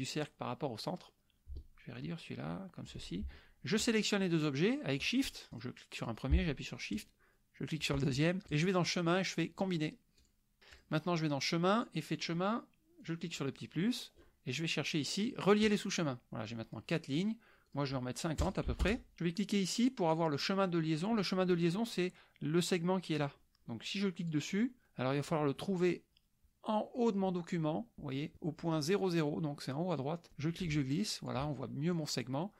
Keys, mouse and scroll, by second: 1.9-3.0 ctrl+shift+drag, 3.8 shift+click, 5.3 shift+click, 5.6 click, 7.0 shift+click, 8.6 click, 10.3 click, 10.7 click, 11.8 click, 13.0 click, 14.1 scroll down 2, 15.6 click, 17.7 click, 18.8 Return, 24.2-25.5 scroll down 2, 25.5-27.2 drag, 30.3-31.5 ctrl+drag, 31.9 click.